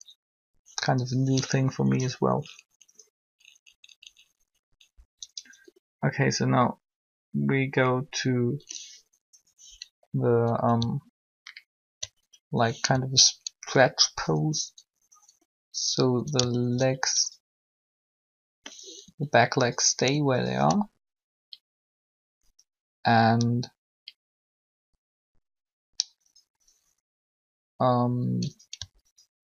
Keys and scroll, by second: 4.9 Up, 19.0 r.